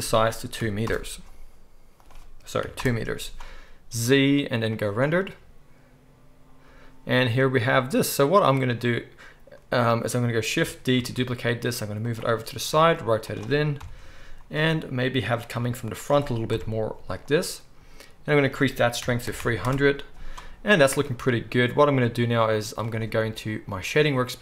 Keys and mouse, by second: 3.9 z, 6.5 click, 6.5 right click, 6.9-10.9 drag, 6.9-10.9 right drag, 10.9 shift+d, 11.3-12.2 drag, 11.3-18.4 right drag, 12.7 r, 13.8 KP_7, 14.7 r, 15.5 g, 16.5 KP_0, 18.4-24.4 middle drag, 19.4 0, 20.7-24.4 drag, 20.7-24.4 right drag.